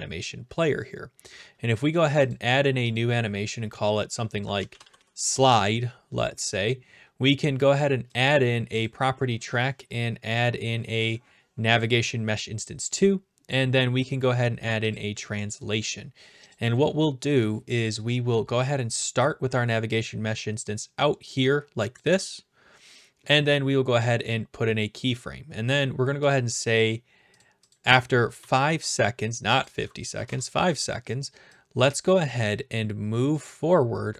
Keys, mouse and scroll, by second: 2.3 click, 3.0 click, 4.3-5.4 typing, 8.2 click, 8.8 click, 10.3 click, 11.8 click, 12.9 click, 14.9 click, 16.0 click, 16.5-17.6 drag, 19.0-20.1 drag, 21.9 click, 24.1 click, 26.3 click, 27.7 click, 28.1-29.0 typing, 29.6 click, 30.2 click, 30.2 5, 30.3 5, 30.6 Return, 32.1 click.